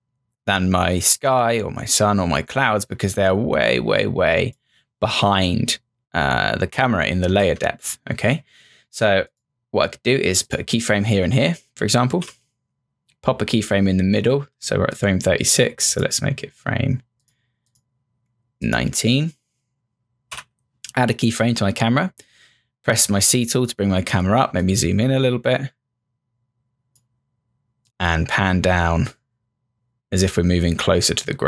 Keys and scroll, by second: 7.4 ctrl+z, 12.2 F6, 20.3 F6, 22.3 c.